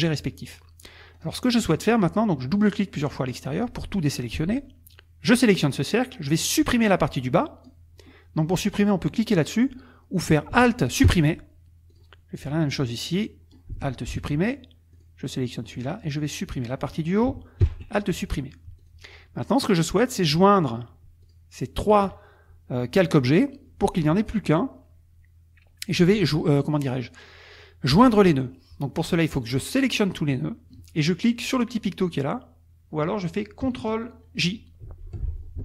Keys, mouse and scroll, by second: 1.1 click, 2.5 click, 5.2 click, 11.0 alt+Delete, 11.9 click, 12.9 click, 14.1 alt+Delete, 14.9 click, 15.7 click, 17.6 alt+Delete, 19.0 click, 19.7 click, 20.3 click, 21.2 shift+click, 21.8 shift+click, 29.0-30.5 drag, 34.8 shift+j.